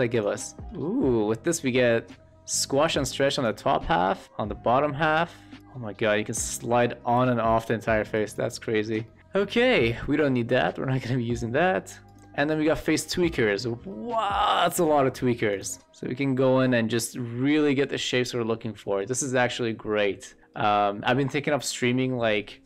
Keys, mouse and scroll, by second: 0.1 click, 0.8-1.2 middle drag, 2.1-3.4 drag, 3.6 shift+middle click, 3.9 middle click, 4.2 click, 4.2 w, 5.6-8.3 drag, 9.0 shift+middle click, 10.7 shift+middle drag, 12.1 click, 13.1 shift+middle click, 13.9 shift+middle drag, 14.6 shift+middle drag, 15.5-17.1 drag, 15.8 w, 20.4 shift+middle click.